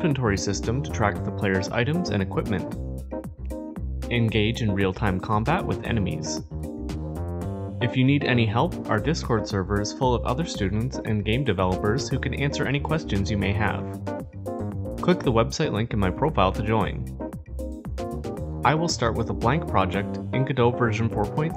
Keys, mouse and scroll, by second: 0.0 click, 0.9 click, 2.2 click, 3.6 click.